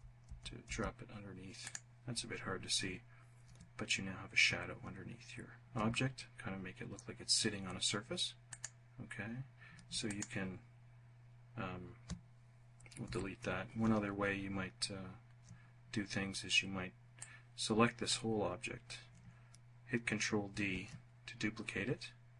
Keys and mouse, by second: 0.9 click, 7.7 click, 9.3 alt+click, 12.3 Delete, 16.4-17.4 drag, 19.8 ctrl+d.